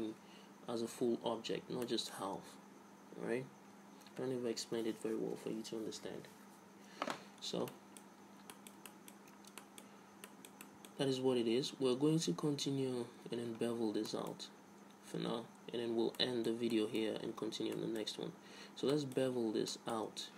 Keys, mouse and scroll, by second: 0.8-1.9 middle drag, 2.2-4.0 middle drag, 8.0 middle click, 9.5-12.6 middle drag, 12.9 Tab, 13.3 middle click, 14.8-16.1 middle drag, 16.5-20.3 middle drag.